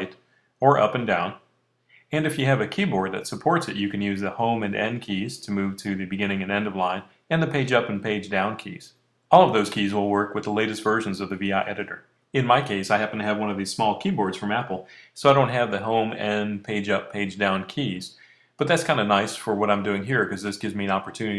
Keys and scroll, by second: 0.7 Left, 0.9 Left, 1.1 Left, 1.6 Down, 1.8 Down, 2.5 Up, 2.7 Up.